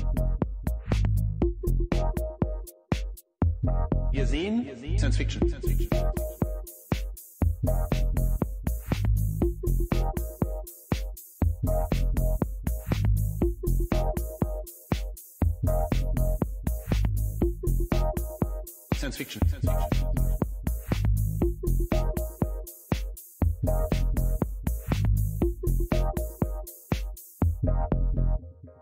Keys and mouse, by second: 1.6-3.4 drag, 5.1 middle click, 6.4 middle click, 6.6 click, 7.7-9.0 drag, 9.8-10.4 middle drag, 10.6 click, 12.1 right click, 15.0-17.4 drag, 18.7 click, 18.8 middle click, 18.9 click, 19.0 middle click, 20.9-22.0 drag, 23.6 n, 25.1 click, 25.9 click, 26.8 x, 27.8 shift+a.